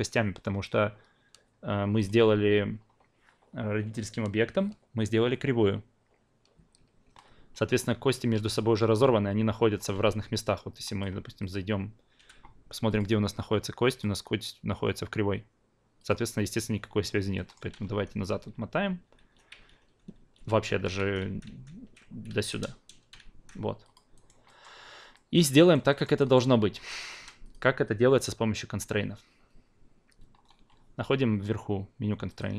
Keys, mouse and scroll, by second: 2.0 drag, 10.8-12.2 drag, 12.2 f, 12.9-16.1 drag, 17.3 alt+middle click, 17.8 ctrl+z, 18.2 ctrl+z, 18.5 ctrl+z, 18.8 ctrl+z, 19.2 ctrl+z, 19.5 ctrl+z, 19.8 ctrl+z, 20.2 ctrl+z, 20.5 ctrl+z, 20.7 ctrl+z, 21.0 ctrl+z, 21.2 ctrl+z, 21.5 ctrl+z, 22.3 ctrl+z, 23.2 ctrl+z, 23.8 drag, 24.1 alt+right click, 24.4 alt+middle click, 25.1 alt+middle click, 25.6 alt+right click, 25.9 alt+middle click, 26.2 alt+right click, 27.4-32.4 drag.